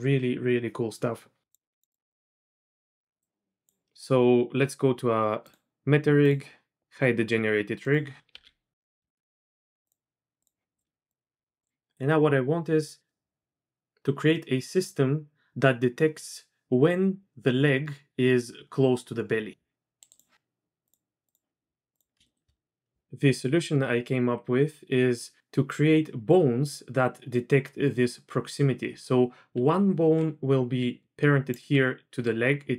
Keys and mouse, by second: 1.4 q, 1.5 click, 1.9 click, 2.1 click, 2.6 KP_1, 3.2 click, 8.3 KP_3, 9.0 shift+middle drag, 9.9 click, 10.8 click, 11.1 click, 12.9 click, 17.4-20.0 drag, 20.3 KP_3, 20.3 z, 20.9 drag, 21.3-22.1 drag, 22.2 shift+middle drag, 29.5 d, 30.0 d, 30.1 d, 30.8-31.7 d, 31.0 click.